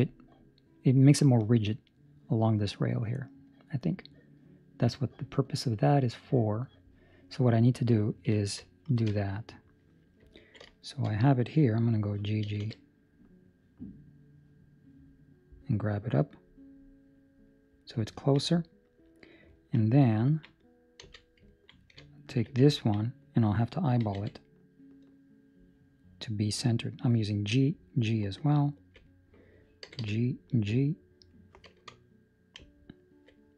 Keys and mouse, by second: 10.3 middle click, 10.7 shift+middle click, 11.1 middle click, 12.4 g, 18.1 ctrl+middle click, 18.5 middle click, 19.5 ctrl+middle click, 19.7 middle click, 20.9 z, 21.4 ctrl+middle click, 22.1 alt+right click, 22.7 ctrl+middle click, 23.9 g, 28.7 alt+right click, 29.8 g, 32.9 alt+right click.